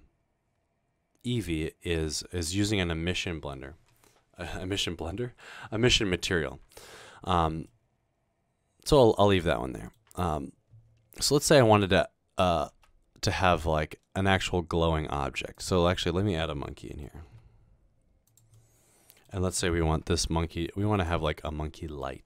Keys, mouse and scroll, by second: 6.6-8.2 scroll down 3, 8.2 middle drag, 9.0-9.9 middle drag, 12.9 a, 15.6 click, 16.7-17.1 middle drag, 17.3 g, 18.3 click, 18.7-19.3 middle drag, 19.9 typing, 21.0 click, 21.3-22.0 middle drag.